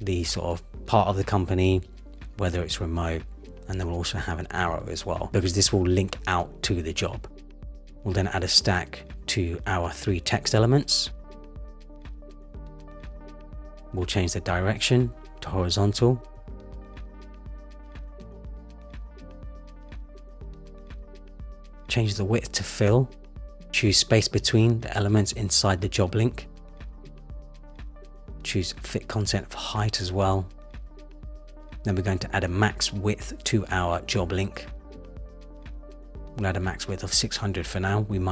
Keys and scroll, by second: 1.7 super+c, 1.8 super+v, 23.4 Return, 37.0 Return.